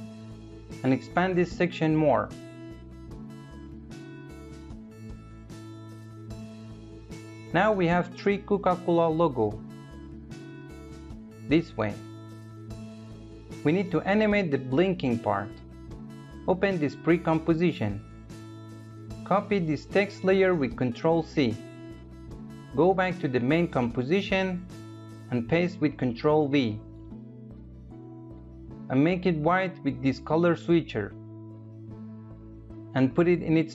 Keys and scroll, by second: 20.0 ctrl+c, 25.5 ctrl+v.